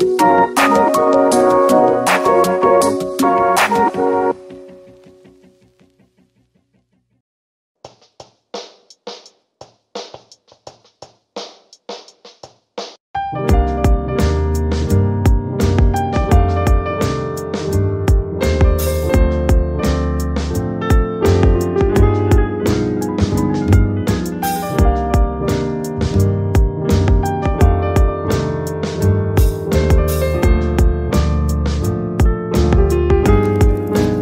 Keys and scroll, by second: 23.0 space, 24.1 Up.